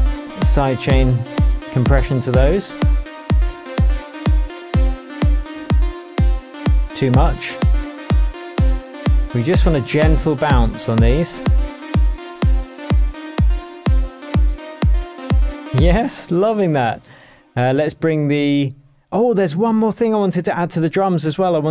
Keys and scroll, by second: 0.0 super+c, 4.4 shift+BackSpace, 5.4 shift+super+BackSpace, 5.5 super+v, 10.0 super+c, 11.2 super+v, 15.9 space, 20.4 super+t.